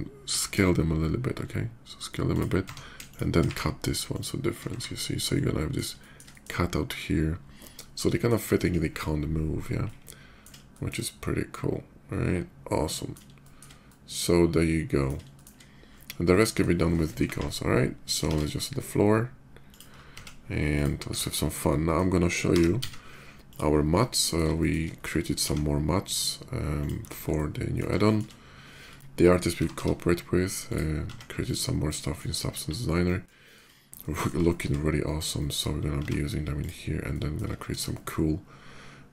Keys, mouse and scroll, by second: 0.1 s, 2.1 shift+click, 2.2 Tab, 2.8 shift+Tab, 2.9 click, 3.8 click, 3.8 q, 4.6 shift+2, 4.8-7.0 middle drag, 7.5-8.0 shift+middle drag, 9.6-10.2 middle drag, 10.5 shift+middle drag, 10.8-12.9 shift+middle drag, 13.1 shift+middle drag, 13.6-15.2 shift+middle drag, 15.8-16.4 shift+middle drag, 17.8 shift+click, 18.0 shift+a, 19.3 click, 19.6 middle click, 20.5 click, 20.5 s, 21.4-21.7 middle drag, 22.4 g, 22.6 z, 22.7 g, 23.1 click, 23.5 middle click, 24.3 shift+middle click, 24.6 shift+middle click, 25.2 s, 26.6 click, 26.7 middle click, 27.0-27.5 middle drag, 27.8 shift+middle click, 28.6 shift+middle drag, 28.9 y, 29.7 g, 30.3 click, 30.8 s, 31.2 click, 31.5-31.9 middle drag, 32.2 KP_5, 32.7 middle drag, 33.1 shift+middle drag, 33.6-34.0 shift+middle drag, 34.2 shift+middle drag, 34.6 shift+middle click, 34.8 shift+middle click, 35.1 shift+middle drag, 35.8 s, 36.3 click, 36.7 middle click, 37.3 shift+middle drag, 37.6-39.1 shift+middle drag.